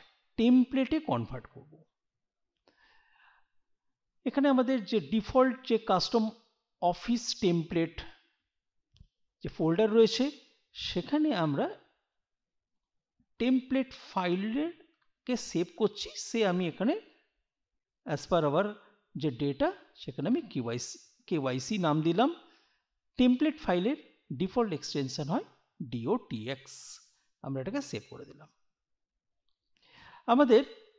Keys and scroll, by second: 14.6 BackSpace, 17.1 k, 19.4 y, 20.3 c.